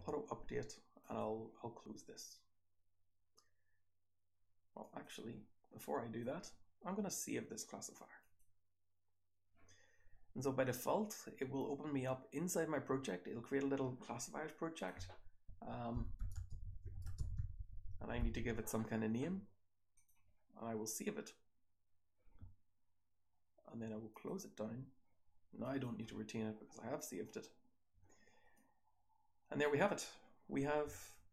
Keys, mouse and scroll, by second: 27.0 scroll down 1, 28.5-29.6 drag, 28.5-29.6 scroll down 1, 29.6-31.3 scroll down 1.